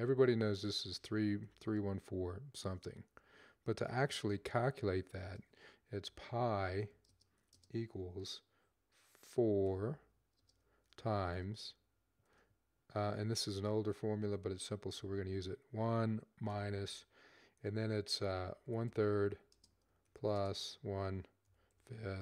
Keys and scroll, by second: 0.0-1.2 typing, 3.6-7.5 typing, 9.1-9.9 typing, 12.2 typing, 14.6-16.3 typing, 18.1-22.0 typing.